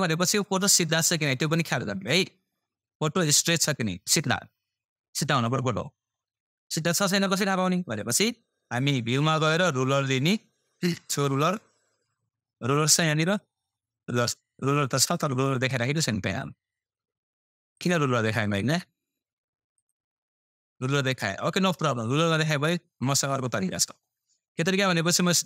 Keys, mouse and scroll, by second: 4.8-25.4 drag.